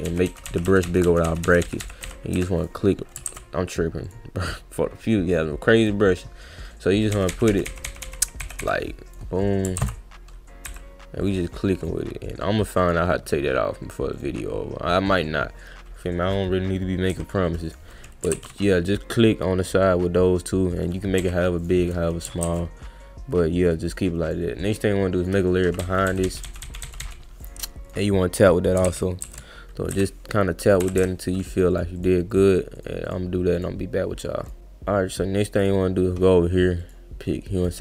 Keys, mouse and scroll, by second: 2.6 click, 3.2 ctrl+z, 4.0 click, 5.1 drag, 5.8 click, 9.1 click, 9.8 ctrl+z, 11.2 click, 11.8 click, 12.8 click, 14.1 click, 17.6 click, 18.3 ctrl+z, 21.6 click, 22.4 ctrl+z, 23.9 click, 24.3 click, 25.2 click, 27.4 click, 27.9 click, 28.8 ctrl+z, 29.2 ctrl+z, 31.3 click, 31.7 click, 32.0 click, 32.3 click, 32.7 click, 33.1 click, 33.5 click, 34.4 click, 35.6 click, 36.8 click, 37.6 click.